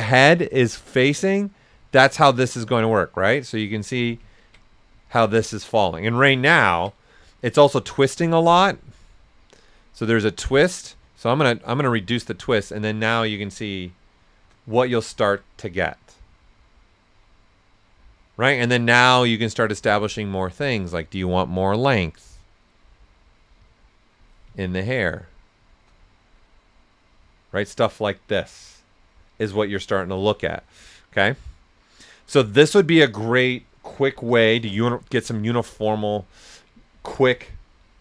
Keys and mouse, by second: 0.8 click, 4.3 ctrl+right click, 8.9-13.2 drag, 13.2 right click, 14.7 ctrl+right click, 19.5-21.7 drag, 24.5 ctrl+right click, 34.3 shift+m, 34.7 right click, 37.8 typing.